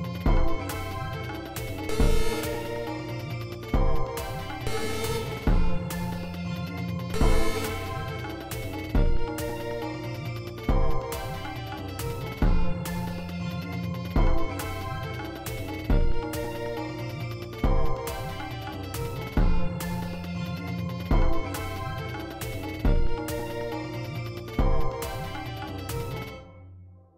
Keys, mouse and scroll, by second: 1.0 click, 1.8 space, 4.3 space, 6.8 space, 8.4 space, 9.4 click, 10.1 click, 11.0 click.